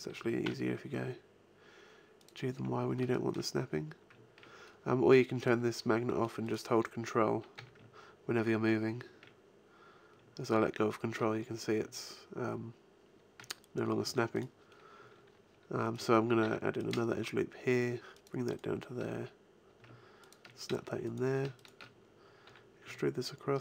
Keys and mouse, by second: 0.1 g, 2.3 click, 2.5 a, 5.3-6.6 drag, 7.1-8.3 drag, 7.5 g, 14.5-16.4 drag, 16.4 ctrl+r, 17.8 click, 18.5 click, 18.9 g, 21.9 click, 21.9-23.3 right drag, 22.4 e.